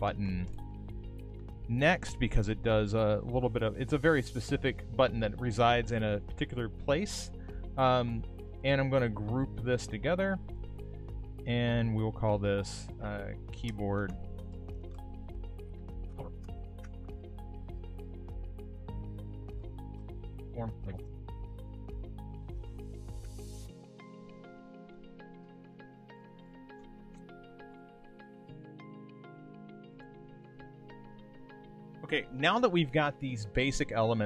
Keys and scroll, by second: 10.3 super+c, 13.6 shift+k.